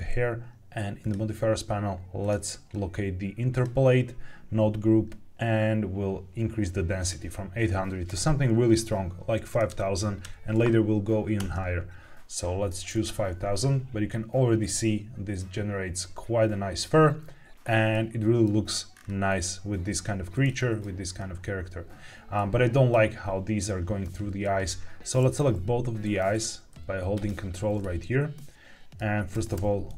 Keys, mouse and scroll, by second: 0.9 click, 2.1 click, 3.4 click, 6.9-11.6 drag, 9.6 KP_0, 12.8 click, 17.8-18.4 middle drag, 18.9-20.4 scroll up 4, 20.4-20.7 middle drag, 21.1-22.3 scroll down 1, 22.3-22.8 middle drag, 24.3-25.0 middle drag, 25.0 ctrl+click, 26.2 click, 27.0 ctrl+click, 28.0 middle click, 29.2 g, 29.5 y.